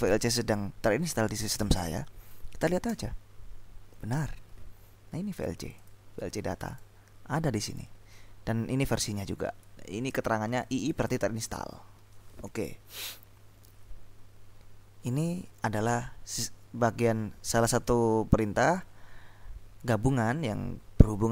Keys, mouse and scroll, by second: 0.0-0.7 typing, 3.1 Return, 5.7 click, 7.8 click, 9.2-10.3 drag, 10.8 click, 13.0 click.